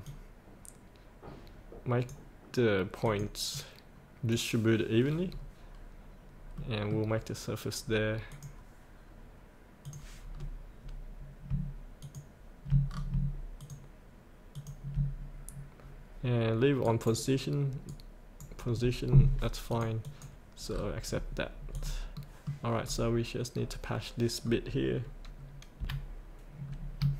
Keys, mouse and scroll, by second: 5.3-6.6 scroll up 1, 6.6 middle click, 8.3 click, 10.3 scroll down 1, 12.0 ctrl+click, 12.9-13.2 scroll down 1, 13.6 ctrl+click, 14.5 ctrl+click, 16.8-19.1 right drag, 20.8-21.7 scroll up 1, 21.7 click, 22.1 middle click, 22.9-24.4 scroll down 1, 25.8 F8, 26.6-27.1 scroll up 1.